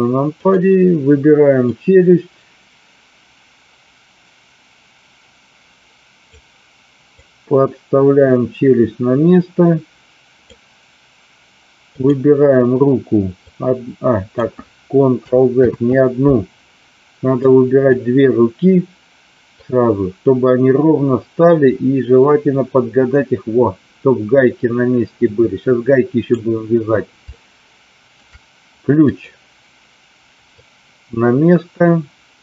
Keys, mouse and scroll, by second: 0.2 click, 1.7-6.3 drag, 7.2-10.5 drag, 11.9 click, 13.5-14.5 drag, 15.7 ctrl+z, 17.5-18.0 drag, 19.6-26.2 drag, 27.3-28.1 shift+middle drag, 30.5-32.4 drag.